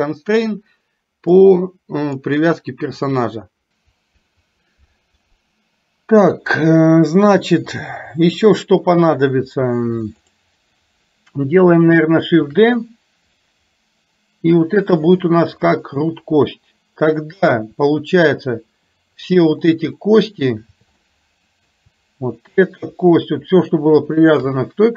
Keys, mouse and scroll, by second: 1.4 click, 7.9-9.1 drag, 10.3 click, 18.0 shift+middle click, 19.4 click, 20.1 middle click, 21.1 middle click, 24.1 shift+click.